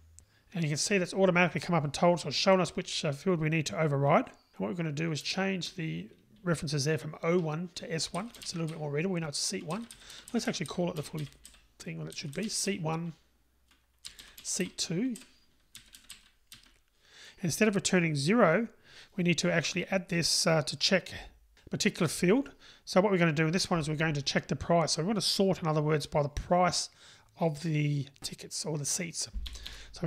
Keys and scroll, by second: 8.5 Delete, 20.1 Delete.